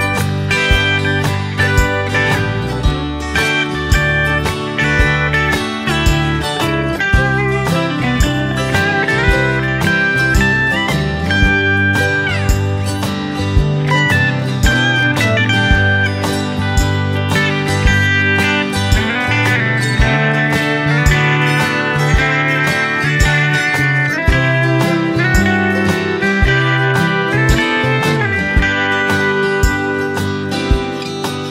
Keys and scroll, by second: 1.0 Delete, 2.0 Delete, 6.5 ctrl+c, 6.6 ctrl+v, 19.3 space, 21.5 space, 27.5 space, 31.0 space.